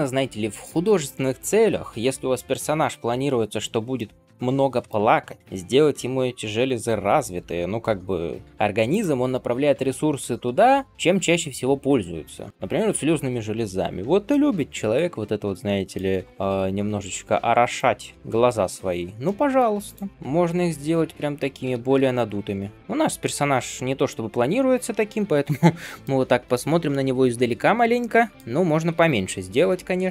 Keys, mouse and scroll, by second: 3.9-5.4 middle drag, 7.2 r, 14.2-16.2 middle drag, 16.2 g, 17.9-18.4 scroll down 1, 18.4-18.9 scroll up 2, 19.1 middle click, 19.7 click, 20.1 middle click, 20.1 g, 21.0-21.5 scroll down 2, 21.6 alt+shift+z, 21.9-22.6 scroll down 3, 22.6-24.5 shift+middle drag, 22.7 scroll up 1, 24.5-25.0 scroll down 3, 25.3 alt+shift+z, 25.4-25.7 scroll down 1, 25.7 middle click, 26.1 scroll down 1, 26.4-28.3 middle drag, 28.5 scroll up 2, 28.8 alt+shift+z, 29.1-30.1 scroll up 5.